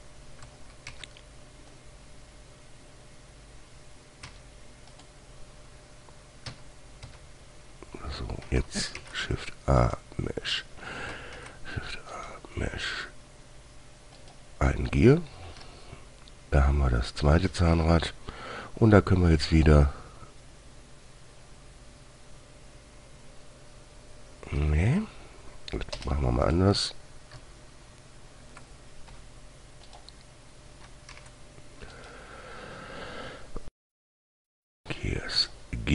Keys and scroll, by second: 1.3 shift+a, 4.6 Escape, 6.8 Tab, 7.4 Tab, 9.3 shift+a, 11.7 shift+a, 16.0 g, 25.0 Delete, 26.3 Return, 27.1 typing, 29.5 g, 31.5 shift+a.